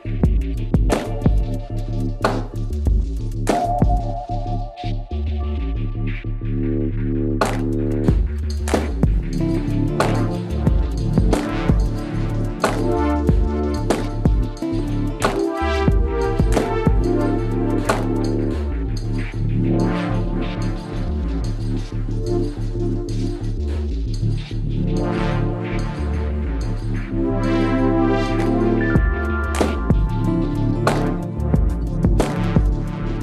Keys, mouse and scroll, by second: 2.0 KP_Decimal, 2.4 middle click, 3.6 c, 6.0-7.9 right drag, 6.5 c, 7.9 middle click, 11.9-13.4 right drag, 12.3 KP_Decimal, 13.4-14.8 middle drag, 13.7 i, 15.7-17.2 middle drag, 16.2 z, 17.2-18.8 drag, 18.3 KP_3, 18.6 KP_Decimal, 18.9 click, 19.0-21.7 middle drag, 19.6 x, 22.5 Tab, 24.4 ctrl+s, 24.8 z, 27.2 Tab, 29.0 right click, 29.7 c, 30.6 right click, 31.8-33.2 right drag, 31.8 x.